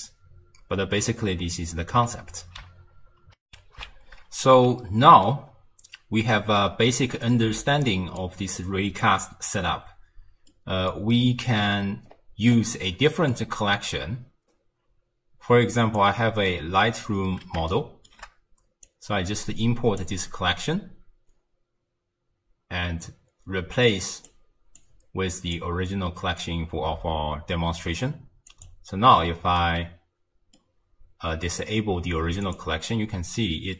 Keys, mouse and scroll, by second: 3.4 ctrl+alt+shift+w, 3.7 ctrl+alt+shift+q, 5.2-8.2 ctrl+middle drag, 8.2 click, 10.5-11.6 middle drag, 11.6-13.1 scroll up 4, 13.1 middle click, 13.3-14.5 scroll up 1, 14.5-15.1 scroll up 2, 15.8 click, 17.1-17.7 scroll down 1, 17.7-18.8 shift+middle drag, 18.8 click, 23.0 click, 24.8 click, 28.5 click, 30.6-32.4 middle drag, 32.4 click, 32.9-33.7 middle drag.